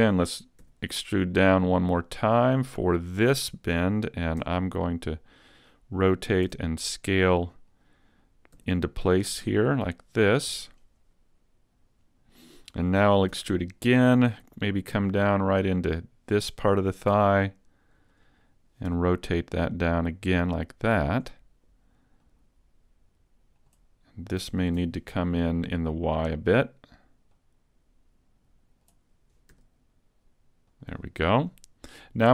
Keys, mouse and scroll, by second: 0.6 e, 3.4 click, 4.4 r, 6.5 s, 7.8 click, 8.6 g, 10.4 click, 13.4 e, 16.5 click, 17.1 s, 18.2 click, 18.9 r, 21.3 click, 22.2 click, 24.4 s, 26.6 click, 27.4 click, 29.6 r, 31.0 click.